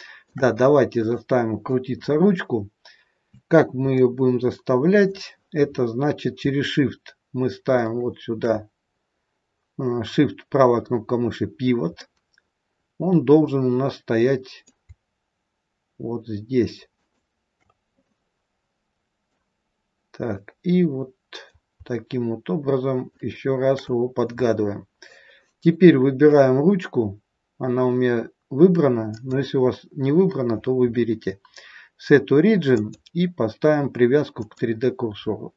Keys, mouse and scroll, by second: 0.8 click, 3.8 middle click, 7.7 shift+right click, 12.0 middle click, 16.9 shift+right click, 18.0 middle click, 20.3 middle click, 23.2 shift+right click, 28.9 click.